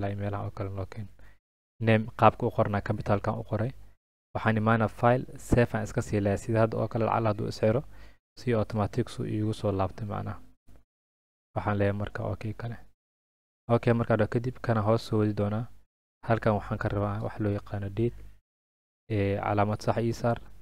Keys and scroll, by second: 17.0-18.3 typing.